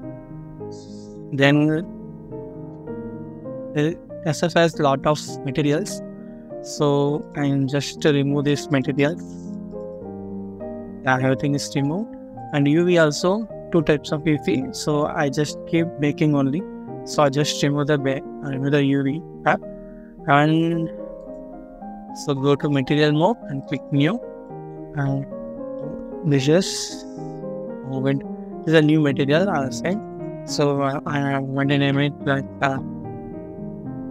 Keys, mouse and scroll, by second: 6.0-7.0 scroll up 1, 8.5 double click, 24.3 middle click, 24.8 scroll up 1, 25.6 middle click, 26.7 scroll up 1, 27.4 middle click, 28.6 scroll up 1, 30.0 double click, 31.6 BackSpace, 34.0-34.1 typing.